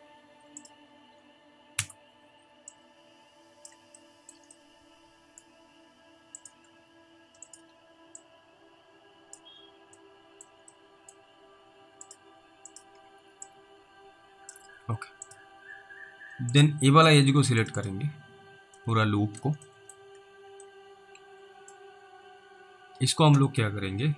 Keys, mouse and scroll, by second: 0.6 ctrl+click, 1.8 ctrl+r, 3.0 click, 4.9 middle click, 6.4 click, 7.5 ctrl+click, 8.5 click, 9.5 scroll down 1, 10.3 alt+middle click, 11.0 middle click, 11.3 scroll up 1, 12.1 click, 12.8 ctrl+click, 13.8 click, 15.3 click, 15.7-16.5 scroll down 1, 16.6 click, 17.8 double click, 18.2-19.0 scroll down 2, 19.1 middle click, 20.0 middle click, 20.3 scroll up 1, 21.0 alt+middle click, 22.1-23.6 scroll up 1.